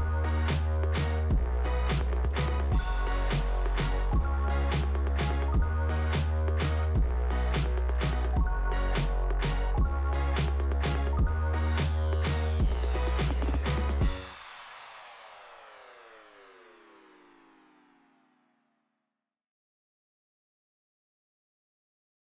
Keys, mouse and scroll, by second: 0.1 click, 1.6 click, 5.3 click, 5.6 click, 7.9 click, 9.3 click, 11.3 click, 12.3 middle click, 14.5 click, 21.0 click.